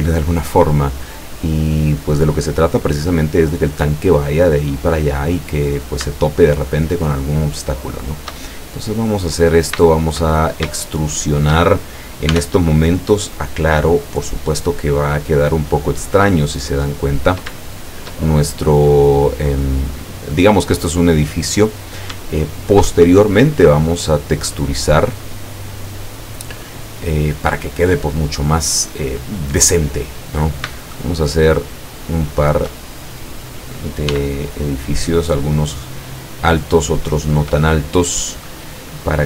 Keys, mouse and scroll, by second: 5.6 right click, 6.9 shift+right click, 7.6 shift+right click, 8.0 shift+right click, 8.4 shift+middle click, 9.4-9.9 scroll up 2, 9.9 shift+middle click, 12.4 e, 14.6 click, 14.9-16.9 middle drag, 17.0-17.5 scroll up 1, 17.7-18.7 shift+middle drag, 18.7 scroll up 1, 19.7 scroll down 1, 20.0-21.1 middle drag, 21.5 middle click, 24.1-25.3 middle drag, 30.5 shift+right click, 31.0 shift+right click, 31.5 shift+right click, 31.9 shift+right click, 32.9-33.9 shift+middle drag, 34.2 e, 35.2 click, 36.3-37.2 middle drag.